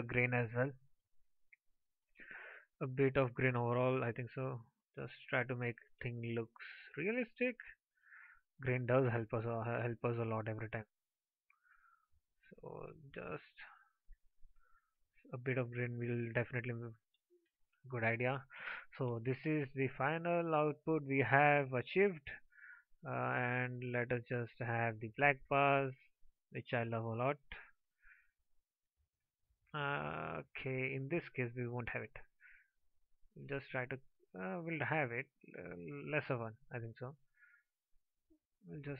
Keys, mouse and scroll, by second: 19.2 ctrl+s.